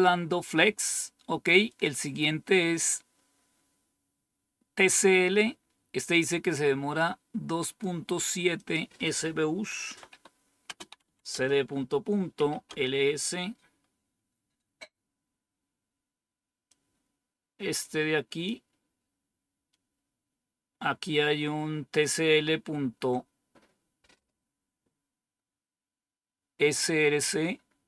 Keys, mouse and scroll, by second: 1.6 click, 6.9 click, 8.5 click, 9.8-12.9 typing, 16.6-18.4 drag.